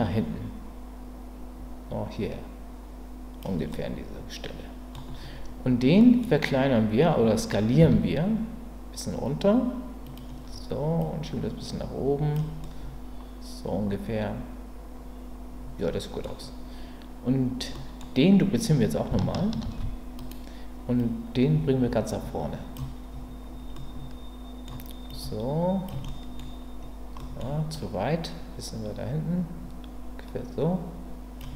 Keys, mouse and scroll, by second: 3.7-4.9 middle drag, 6.0 middle click, 6.2-7.8 scroll down 1, 7.8 s, 10.0 click, 11.0-12.3 drag, 12.6-13.8 scroll up 1, 13.8-14.9 scroll up 1, 14.9-15.9 scroll up 1, 15.9-16.2 scroll up 1, 16.2-17.7 scroll down 1, 17.7-19.1 middle drag, 17.7-18.0 scroll up 2, 19.6 shift+d, 21.0-22.7 drag, 23.8-24.6 middle drag, 23.8-24.3 scroll up 2, 24.3 scroll up 1, 25.1-25.8 drag, 26.1-27.7 middle drag, 27.7-31.4 drag.